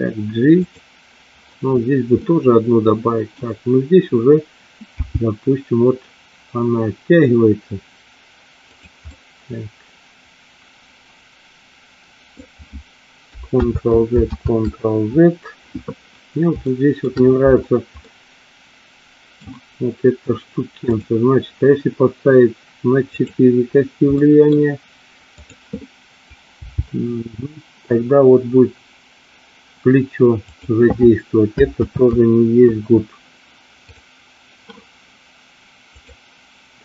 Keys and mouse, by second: 0.8 click, 2.2-3.3 middle drag, 5.0 g, 9.1-12.4 middle drag, 13.9 ctrl+z, 14.5 ctrl+z, 16.7 shift+middle click, 18.1-19.5 middle drag, 24.2 middle click, 25.5 click, 26.7 g, 32.1 ctrl+z, 34.0 click.